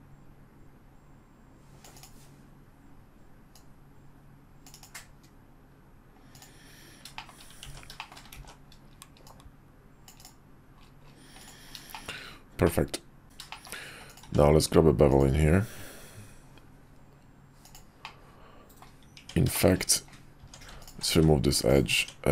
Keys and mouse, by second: 3.5 click, 6.4-7.1 drag, 7.1 shift+middle click, 7.6 ctrl+z, 8.0 shift+middle click, 8.4 ctrl+z, 9.2 click, 11.4 drag, 11.9 shift+middle click, 12.6-13.2 middle drag, 13.2 `, 13.5 middle drag, 14.2 q, 18.0 middle click, 19.2 Tab, 19.5 shift+middle click, 20.8 alt+click, 21.1 x, 21.9 Tab.